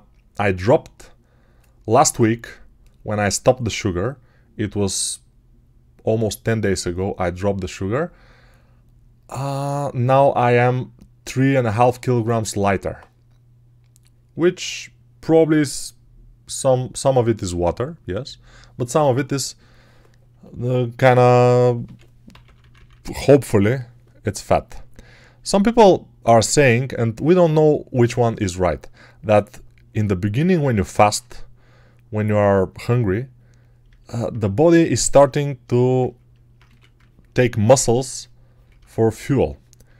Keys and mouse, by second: 21.7-23.2 typing, 35.9 ctrl+alt+right click, 36.5 1.